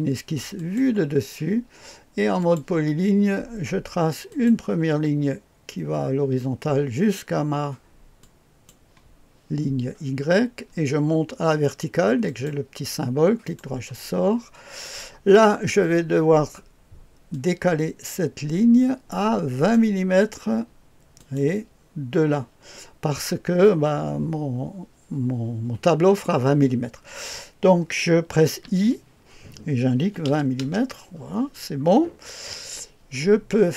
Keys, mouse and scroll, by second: 0.5 click, 2.4 click, 4.3 click, 8.2 click, 12.2 click, 13.4 right click, 14.8 right click, 15.2 right click, 15.4-17.3 scroll up 2, 17.3-19.7 drag, 21.1 click, 23.5-28.6 scroll up 2, 28.6 i, 29.9 KP_2, 30.2 KP_0, 30.5 Return, 31.9-33.7 scroll down 2.